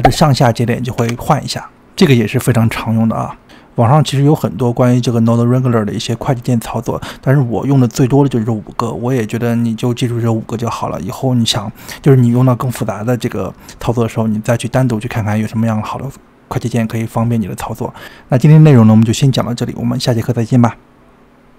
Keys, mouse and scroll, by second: 1.0 alt+s, 2.1 alt+s, 4.1 alt+s.